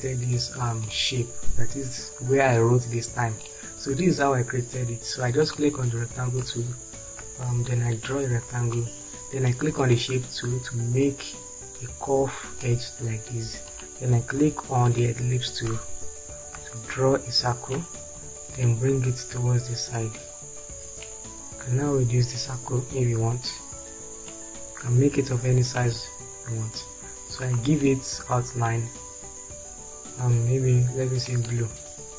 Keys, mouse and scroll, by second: 18.2 space, 28.4-32.1 drag.